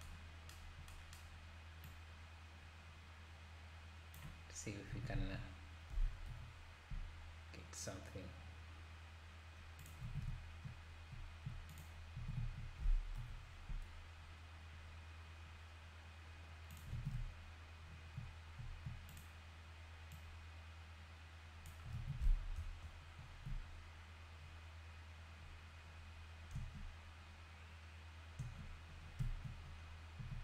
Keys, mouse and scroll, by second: 1.9-4.9 drag, 4.9 s, 10.1 alt+a, 11.7 click, 12.4 s, 17.0 alt+a, 19.1 click, 20.1 click, 22.0 alt+a, 22.6 KP_0, 23.2-24.0 scroll up 8, 24.4-25.7 scroll down 1, 26.5 space, 28.4 space, 29.0 scroll down 1, 29.6-30.2 scroll down 3, 30.2 z.